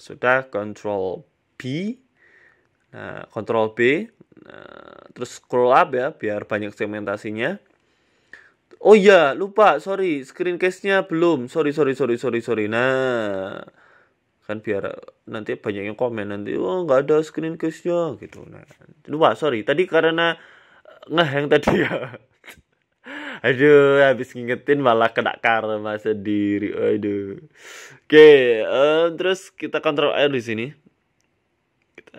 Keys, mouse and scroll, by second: 12.3 click, 12.6 n, 13.1 shift+middle click, 14.2 shift+d, 15.9 scroll down 5, 16.1 scroll up 1, 16.3 shift+middle click, 16.6 scroll down 1, 16.9 shift+middle click, 19.6 shift+d, 22.0 shift+middle click, 23.3 click, 23.8 click, 24.2 shift+middle click, 24.5 scroll up 1, 24.5 scroll down 5, 24.8 g, 26.6 middle click, 26.9 scroll down 2, 27.1 shift+middle click, 27.4 middle click, 29.8 ctrl+r.